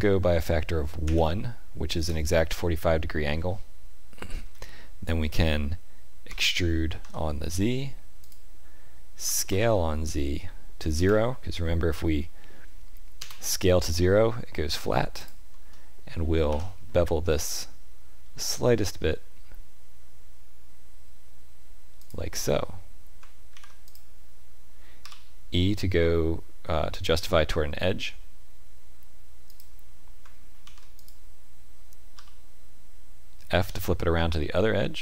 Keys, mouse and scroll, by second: 6.2 e, 9.2 s, 15.1 alt+click, 16.4 ctrl+b, 23.4 ctrl+r, 30.5 ctrl+r.